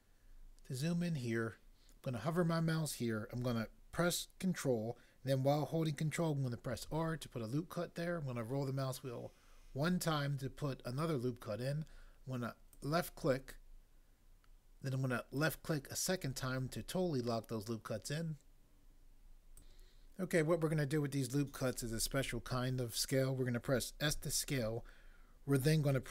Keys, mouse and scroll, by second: 6.8 ctrl+r, 9.4 scroll up 1, 12.8 click, 19.5 click, 24.0 s.